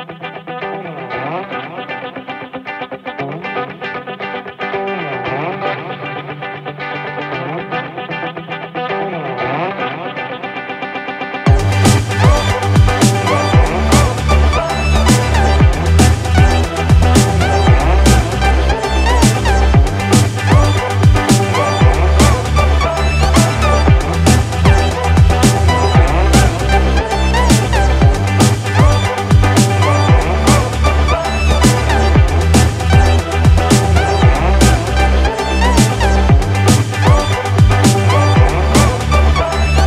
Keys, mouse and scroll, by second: 0.6 click, 1.1 click, 1.9 click, 3.0 click, 18.3 right click, 23.3 right click, 38.0 right click.